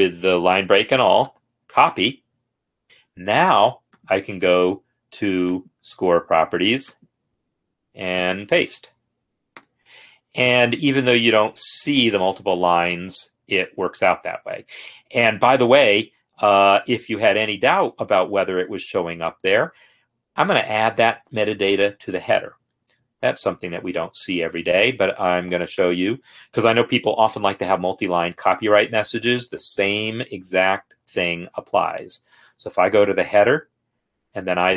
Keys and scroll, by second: 1.5 ctrl+c, 2.8 Escape, 8.8 ctrl+a, 9.8 ctrl+v.